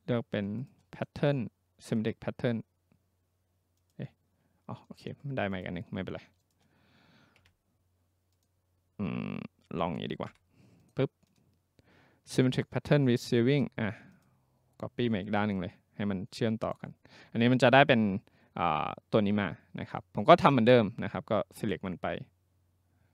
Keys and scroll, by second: 7.4 Delete, 10.3 Delete.